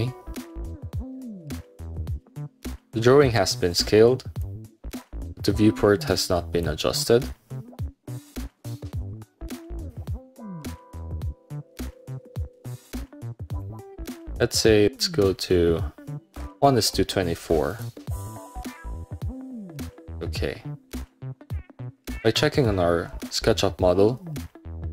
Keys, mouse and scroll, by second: 2.3-2.6 scroll down 1, 3.7 scroll up 1, 4.5-6.7 drag, 8.5 middle click, 9.7 click, 11.7 click, 12.8 click, 13.6 right click, 17.8 click, 20.4 middle click, 20.5 scroll up 1, 23.3 middle click.